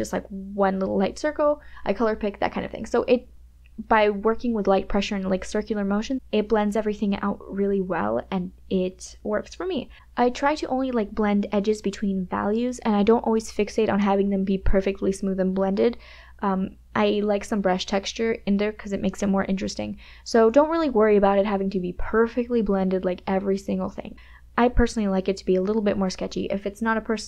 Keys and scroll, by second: 18.8 ctrl+KP_Add, 21.0 ], 21.6 ctrl+z, 22.2 KP_Subtract, 22.2 KP_Add, 25.6 space, 25.6 KP_Add, 26.8 [.